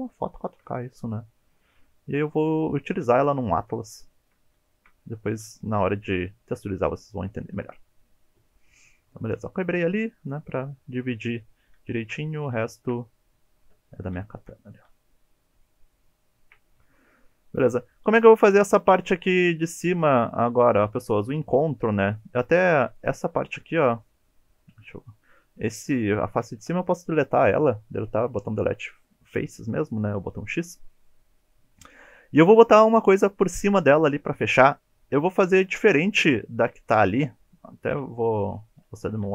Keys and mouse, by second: 0.2 shift+middle click, 2.0 shift+middle click, 3.3 shift+middle click, 4.3 shift+middle click, 4.8 shift+middle click, 5.5 shift+middle click, 11.9 shift+middle drag, 12.6 shift+middle click, 13.5 shift+middle click, 14.3 shift+middle click, 15.1 shift+middle click, 15.3 shift+middle click, 15.7 shift+middle click, 16.1 shift+middle click, 16.4 shift+middle click, 18.2 middle click, 22.5 3, 24.7 alt+z, 26.6 Delete, 30.5 middle click, 31.1 middle click, 37.9 KP_1, 39.2 Tab.